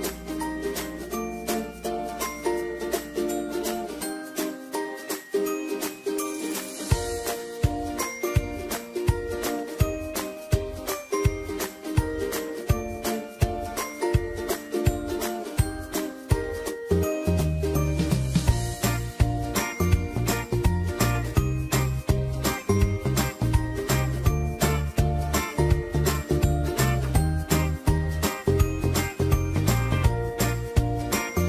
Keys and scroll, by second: 12.1 ctrl+t, 13.6 Escape, 15.6 ctrl+t, 23.0 Up, 25.7 Left, 26.0 Left, 28.4 alt+shift+Return.